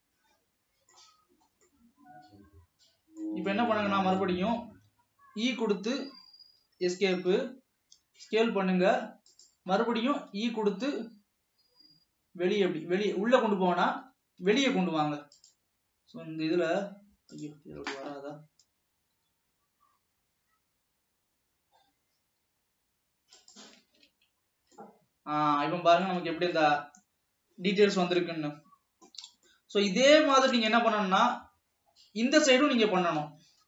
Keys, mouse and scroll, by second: 0.3-5.7 shift+middle drag, 5.7 e, 7.4 s, 9.8 scroll up 1, 10.5 e, 15.4-18.3 drag, 18.3 ctrl+z, 19.4 e, 24.1 alt+a, 24.3 Tab, 24.6 scroll down 2, 24.8-26.7 middle drag, 26.7 ctrl+s, 29.5 scroll down 1, 29.8-30.5 middle drag, 30.5 click, 31.5 Tab, 32.7-33.5 middle drag, 33.5 alt+a.